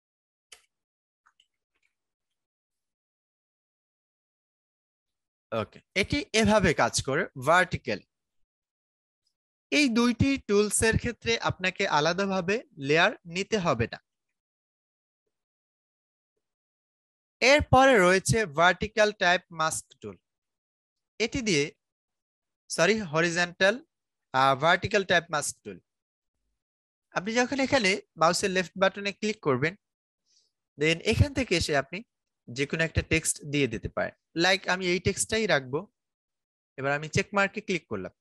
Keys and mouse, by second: 0.0-2.7 typing, 4.4-15.9 drag, 15.9 right click, 16.1 click, 17.0 right click, 19.5 click, 22.2 right click, 24.3 click, 26.1 right click, 26.9 click, 36.8 click.